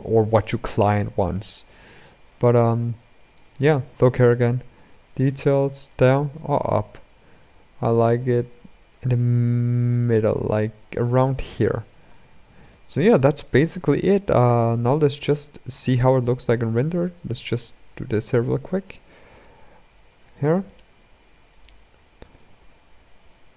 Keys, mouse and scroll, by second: 1.5 scroll down 1, 1.6-3.3 drag, 3.3-4.8 scroll up 8, 4.8-7.6 drag, 11.4-12.3 scroll down 10, 12.3-13.1 scroll up 3, 13.1-13.6 shift+middle drag, 13.6-14.6 scroll down 2, 14.6 z, 15.0-15.6 scroll down 2, 15.6 click, 15.7 shift+a, 16.8 s, 19.2 click, 19.3 g, 20.1-20.8 middle drag, 20.8-21.4 scroll up 6, 21.4-22.3 middle drag, 22.3 g.